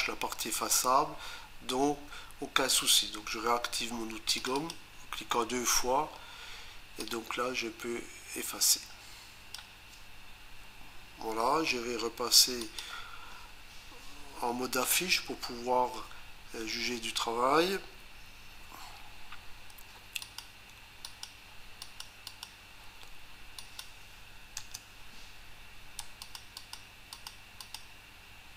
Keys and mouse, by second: 4.4 click, 4.6 click, 7.0 click, 12.6 click, 20.2 ctrl+click, 21.1 ctrl+click, 21.8 ctrl+click, 22.3 ctrl+click, 23.6 click, 24.6 Return, 26.2 ctrl+click, 26.7 ctrl+double click, 27.1 ctrl+click.